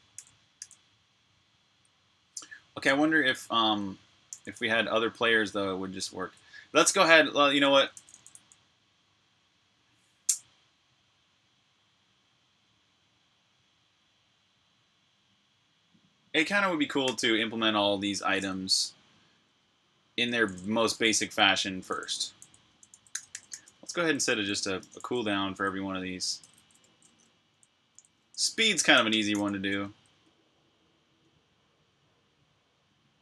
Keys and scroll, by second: 0.0-0.4 typing, 4.1 super+j, 7.6 Escape, 7.8-8.2 typing, 16.9 super+j, 18.5 super+[, 20.4 Return, 20.6-23.6 typing, 24.6-28.7 typing, 31.9 typing.